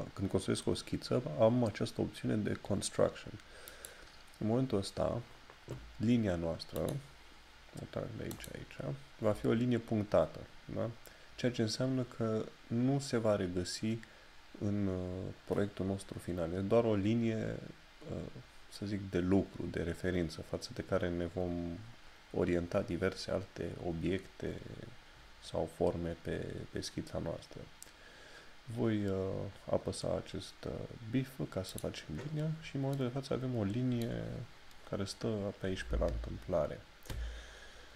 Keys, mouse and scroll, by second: 4.1 click, 6.8 click.